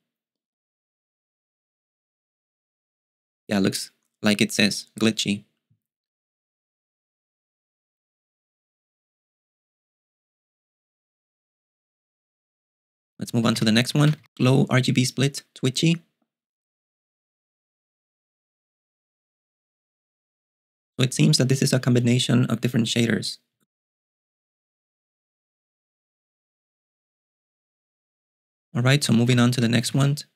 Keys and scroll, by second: 13.1-14.4 typing, 28.8-30.3 typing.